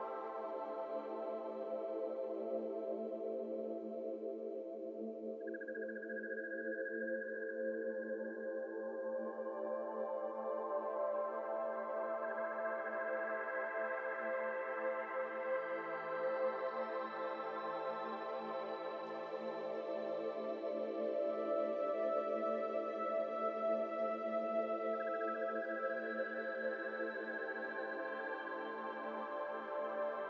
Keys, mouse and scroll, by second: 0.5 ctrl+z, 2.0-2.8 middle drag, 2.8 click, 3.4 click, 4.6-5.0 scroll up 4, 4.6 middle click, 5.9 click, 6.9-8.4 drag, 8.4-9.7 scroll down 8, 8.8 click, 9.2-9.5 middle drag, 9.7 shift+middle drag, 9.8-11.7 scroll up 5, 10.0 middle click, 11.7-13.0 shift+middle drag, 12.6 scroll up 2, 12.9 drag, 13.2 click, 13.6 shift+middle drag, 13.8-14.3 scroll up 2, 14.3 shift+middle drag, 14.6 Tab, 15.0 alt+z, 15.2 click, 16.6 p, 17.3 Tab, 17.6 alt+z, 17.7 alt+z, 18.3 click, 19.3 shift+click, 20.4 ctrl+j, 21.0 z, 21.1 z, 22.0 ctrl+z, 22.3 click, 23.9-24.7 drag, 26.0 shift+click, 26.5 click, 27.9-29.7 drag.